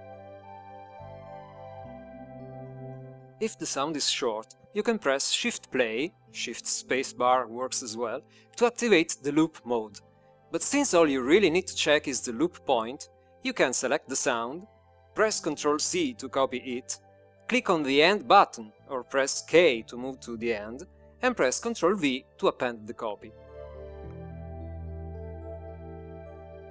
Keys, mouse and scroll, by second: 0.1 click, 16.5 click, 17.1 ctrl+c, 22.2 k, 24.8 ctrl+v.